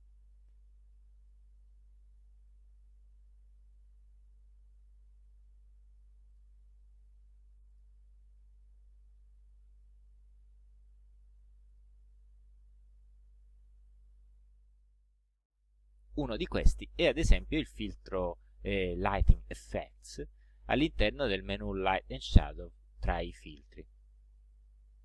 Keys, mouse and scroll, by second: 1.3 click, 6.4 click, 7.1 click, 7.8 click, 9.4 ctrl+z, 11.8 click, 14.8 click, 18.5 right click, 19.5 click.